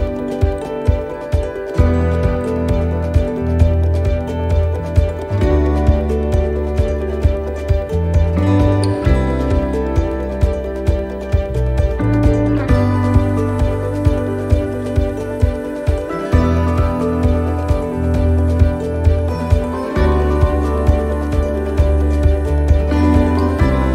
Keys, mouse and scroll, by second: 0.7 ctrl+r, 4.3 ctrl+r, 8.2 ctrl+r, 10.8 middle click, 11.2 scroll down 2, 11.7 shift+middle click, 12.2 middle click, 14.3 ctrl+r, 18.3 shift+middle click, 19.1 ctrl+r, 21.6 middle click, 22.6 shift+middle click, 23.1 middle click, 23.7 shift+middle click.